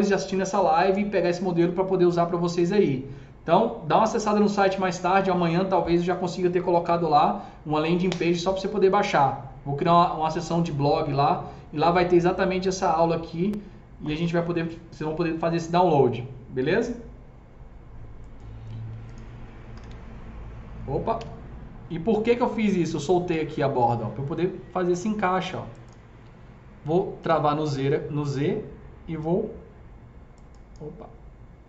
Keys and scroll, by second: 19.4-21.0 typing.